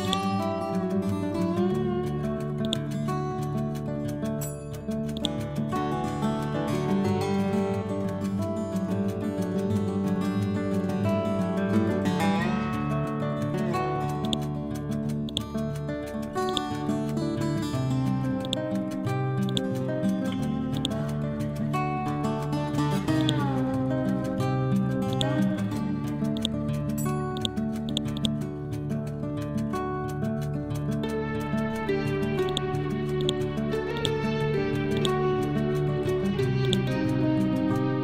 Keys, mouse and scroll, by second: 1.0 Down, 2.5 click, 3.3-4.0 scroll down 1, 5.0-6.4 drag, 6.4 scroll up 1, 7.8 ctrl+Home, 8.7-9.5 scroll down 1, 12.4-12.9 scroll down 1, 13.9 scroll up 1, 14.1 shift+click, 17.4 scroll up 1, 18.3-23.1 drag, 26.2 right click, 27.3-31.3 drag, 31.3 ctrl+Home, 32.4-36.5 drag, 36.5 right click.